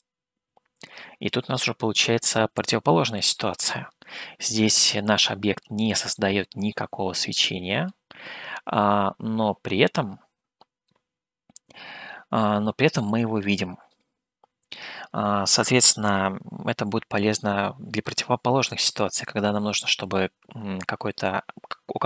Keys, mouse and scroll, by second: 6.2-7.9 middle drag, 8.7-10.9 middle drag, 12.1-14.0 middle drag.